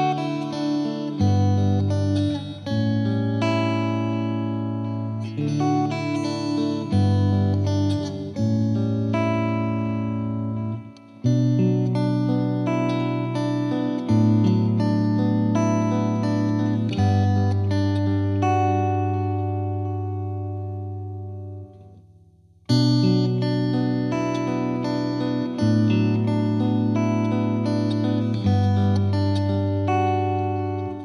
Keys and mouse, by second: 0.3 click, 2.8 click, 3.5 click, 4.2-5.8 drag, 5.8 right click, 6.2 click, 7.1 click, 7.7 click, 8.0 click, 8.4 click, 9.1 click, 9.9 click, 10.7 click, 11.2 click, 11.7 click, 12.7 click, 13.3 click, 14.1 click, 15.0 click, 16.2 click, 16.5 click, 17.1 click, 17.3 alt+click, 17.8 click, 18.5 click, 19.5 click, 20.8 click, 21.6 click, 22.0 click, 22.6-23.7 drag, 23.9 click, 25.6 click, 26.7 click, 28.4 click, 28.8 Delete, 29.7 click, 30.1 click, 30.9 click.